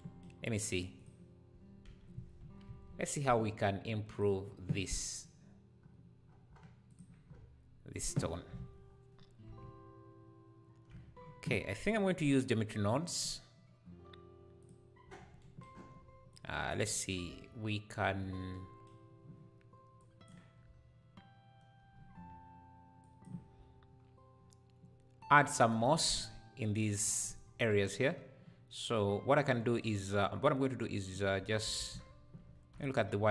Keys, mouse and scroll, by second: 0.9 click, 1.8 /, 4.1-5.8 drag, 5.8 scroll down 1, 6.9 click, 7.2 scroll up 1, 8.8-9.6 scroll down 1, 11.8-15.0 drag, 15.0-15.4 scroll down 2, 15.7-16.3 scroll up 3, 16.3 click, 17.1 scroll up 1, 18.5-20.0 drag, 23.0-31.8 drag, 30.2-31.3 scroll up 1, 31.8 shift+a, 32.6 q.